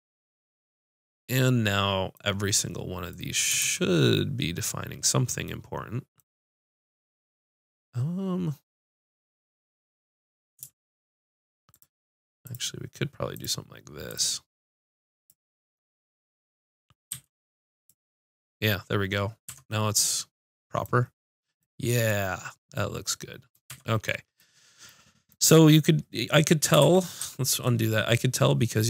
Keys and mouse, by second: 3.6 ctrl+z, 11.7 click, 17.1 x, 19.4 Tab, 19.6 middle click, 23.7 Tab, 26.8 ctrl+z, 27.2 ctrl+z.